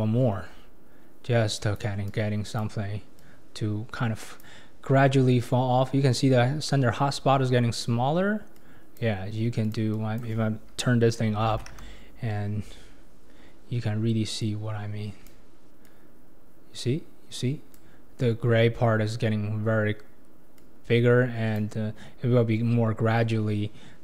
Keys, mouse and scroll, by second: 8.6-12.7 drag, 12.7 scroll up 4, 14.4-18.9 drag, 20.6-23.4 drag, 23.4-23.7 scroll down 4.